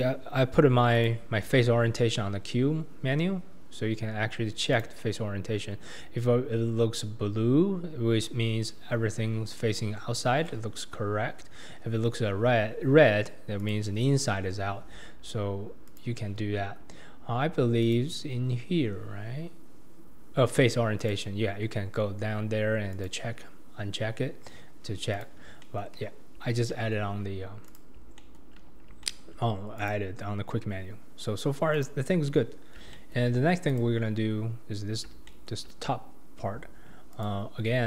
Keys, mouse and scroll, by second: 0.9 click, 1.4 q, 7.0-7.3 scroll down 1, 7.3-8.0 scroll up 2, 8.0-8.9 scroll down 2, 10.7-12.2 scroll up 2, 12.2-12.8 scroll down 2, 12.8-13.6 scroll up 2, 13.6 click, 14.9 q, 17.8-21.0 drag, 25.6 scroll down 1, 25.6-25.9 middle drag, 25.9 KP_1, 26.7-27.7 scroll up 2, 26.7-27.1 shift+middle drag, 27.7 click, 28.2-28.6 shift+middle drag, 28.6-29.0 scroll down 2, 29.0-29.8 shift+middle drag, 29.8 click, 31.7-32.5 drag, 32.5 scroll up 2, 32.9-33.3 shift+middle drag, 33.3-33.7 scroll down 2, 33.7 click, 34.4-35.3 scroll up 1, 35.3-37.1 shift+middle drag, 37.1 click.